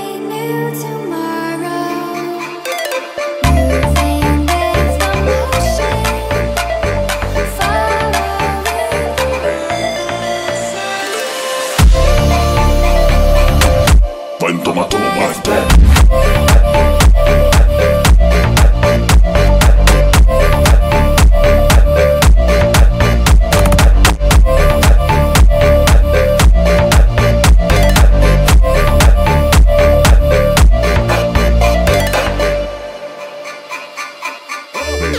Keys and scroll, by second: 6.0 space, 24.2-25.8 typing.